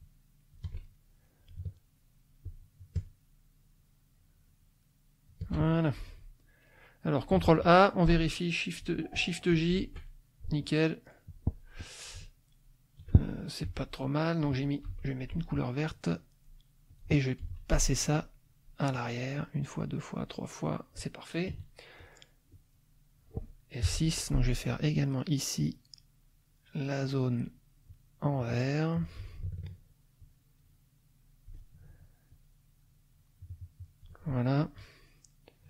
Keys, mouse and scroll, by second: 0.9 shift+middle click, 2.4-5.5 shift+drag, 6.0 F2, 7.4 ctrl+a, 9.5 shift+j, 13.6 F1, 14.3 middle click, 14.8 F2, 15.3 click, 16.9 click, 17.4 F1, 18.9 click, 19.6 click, 20.2 click, 21.5 KP_Subtract, 22.1-22.8 middle drag, 23.0 middle click, 23.8 F6, 24.2 middle click, 25.6-29.2 drag, 30.2-31.7 shift+drag, 32.3-34.2 shift+drag, 35.3 click.